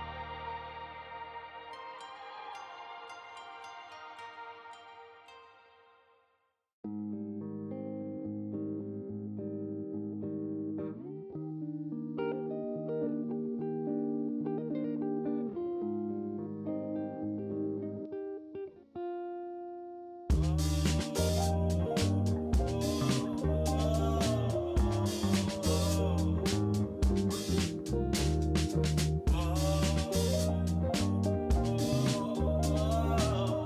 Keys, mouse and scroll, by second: 0.9 click, 4.5 click, 4.9-6.3 drag, 7.2 g, 9.3 click, 11.7 g, 14.3 click, 14.9 r, 17.4 r, 19.4 g, 21.2 g, 23.0 ctrl+s, 24.5-25.6 drag, 25.7 middle click, 26.3 ctrl+a, 27.2 click, 27.6 shift+a, 30.2 KP_3, 31.0 g, 32.6 KP_0.